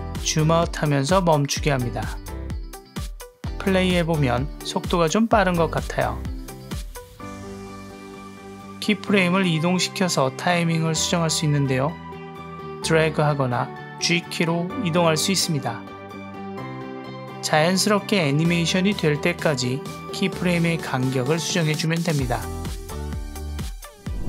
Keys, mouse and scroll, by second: 0.3 i, 1.0 space, 7.2 space, 8.5 click, 8.6 click, 8.8-9.2 drag, 9.6-10.2 drag, 10.5-11.1 drag, 11.5-12.3 drag, 12.7-13.1 drag, 13.5-14.2 drag, 14.5 click, 15.2 click, 16.3 click, 16.9 click, 17.0 space, 18.2 space, 18.4-18.8 drag, 19.0 click, 19.3 drag, 19.8 click, 19.9 click, 20.3 click, 20.9 click, 20.9 space, 22.1 space, 22.2 click, 22.3 click, 22.4 click, 22.6 click, 22.7 drag, 22.9 click, 23.1 click, 23.2 space, 23.7 space, 23.8 click, 24.0 g.